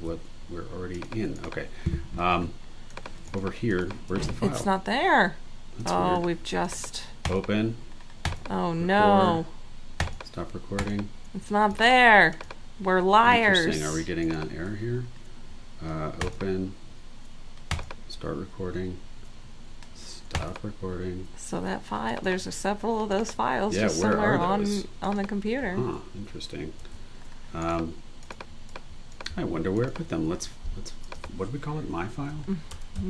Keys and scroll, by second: 0.0 super+w, 26.8 super+w, 32.4-33.0 typing.